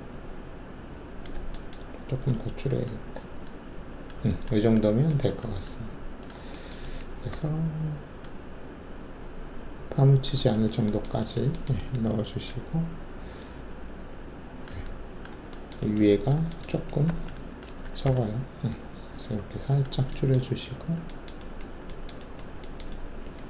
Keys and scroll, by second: 7.3 alt+w, 17.0 alt+1, 18.0 r, 20.7 alt+`.